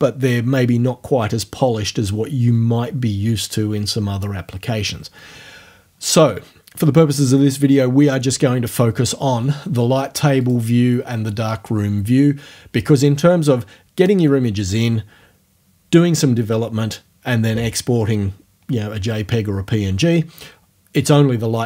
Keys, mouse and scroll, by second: 10.4 click.